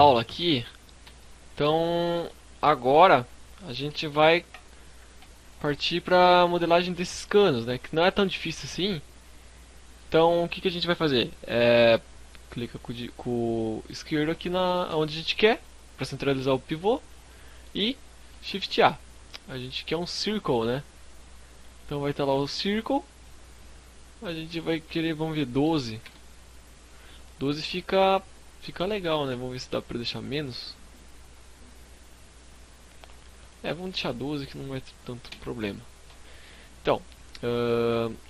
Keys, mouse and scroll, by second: 1.1 middle click, 1.4-2.0 shift+scroll up 1, 2.0 KP_1, 3.2 KP_3, 4.6-5.4 scroll up 8, 5.3 shift+middle click, 7.5 scroll up 1, 8.1 scroll down 1, 8.5 scroll down 2, 13.4 click, 16.0-16.4 scroll up 3, 16.3 shift+middle click, 17.6 shift+a, 21.4 middle click, 23.4 click, 38.2 shift+middle click.